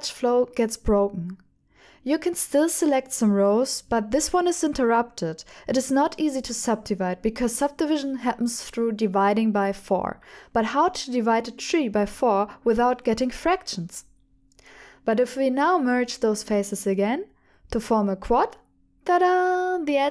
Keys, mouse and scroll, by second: 0.1 f, 0.6 click, 2.3 f, 3.0 Tab, 4.7 Tab, 5.4 alt+click, 6.1 alt+click, 6.9 3, 8.9 alt+click, 9.7 alt+click, 10.7 alt+click, 11.8 alt+click, 11.8 typing, 13.4 alt+click, 15.0 alt+click, 16.2 shift+click, 17.0-18.5 drag.